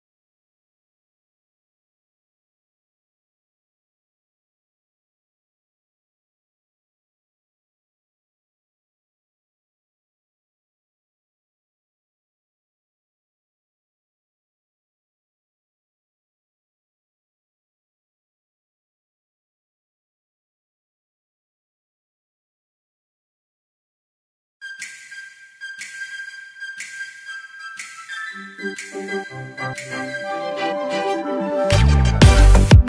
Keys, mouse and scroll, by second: 3.0 click, 6.1 click, 7.6 x, 8.9 click, 12.8 ctrl+z, 15.6 ctrl+alt+z, 16.8-20.0 drag, 23.0 ctrl+z, 23.6 click, 28.2 alt+scroll down 1, 30.0 space, 30.1 click, 30.5 space, 30.8 click, 30.9 space.